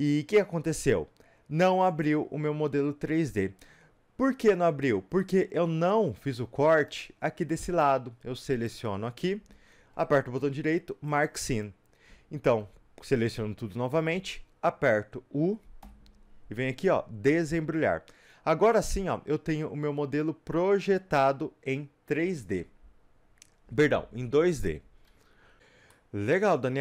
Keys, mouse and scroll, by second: 5.1 scroll up 2, 5.2-8.6 middle drag, 8.6-11.2 drag, 11.2-15.4 right drag, 12.6 a, 17.5 u, 18.8-26.8 middle drag.